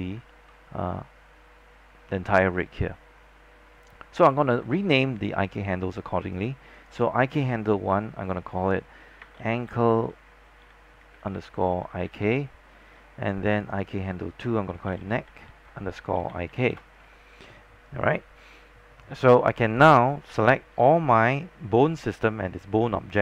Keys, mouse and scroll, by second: 0.1 scroll down 1, 0.3 alt+middle click, 4.7 alt+middle click, 6.4 click, 9.1-13.2 typing, 13.6 click, 15.1-17.1 typing, 19.7 click.